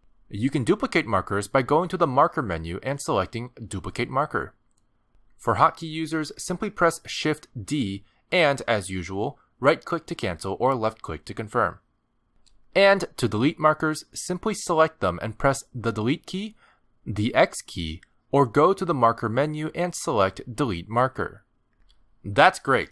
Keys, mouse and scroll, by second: 2.7 click, 9.2 shift+d, 12.1 g, 13.5 click, 16.6 Delete, 18.1 click, 18.6 x, 19.8 click, 21.9 click.